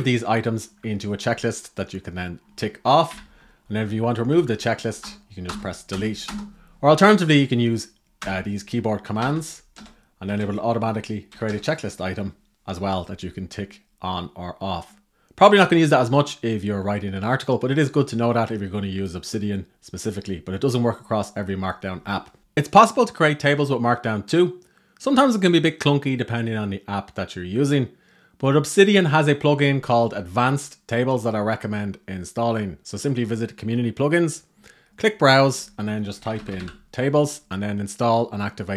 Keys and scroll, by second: 2.8 super+l, 3.5 alt+Left, 3.9 alt+Left, 4.1 alt+Left.